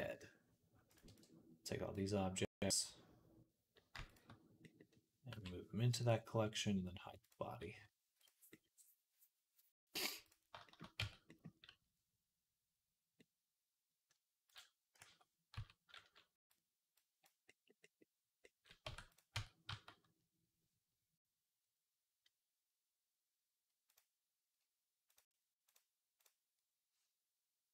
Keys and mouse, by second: 0.9 b, 2.6-3.8 right drag, 3.8 shift+middle click, 4.0 shift+middle click, 5.1 m, 7.0 click, 7.0 middle click, 7.0-13.9 right drag, 8.0-10.1 drag, 8.0-10.1 middle drag, 10.8 Tab, 13.9-18.2 drag, 14.3 right click, 14.8 a, 15.4 q, 16.8-18.2 right drag, 18.7 Tab, 19.2 Tab, 19.5 a.